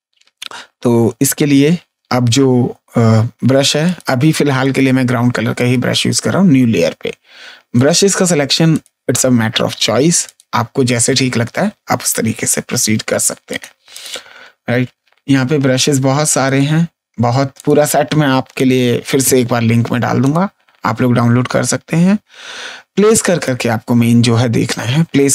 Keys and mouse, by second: 0.5 ctrl+z, 3.8 click, 7.7 click, 12.0 ctrl+z, 13.4 click, 16.4 click, 17.5 click, 23.4 click.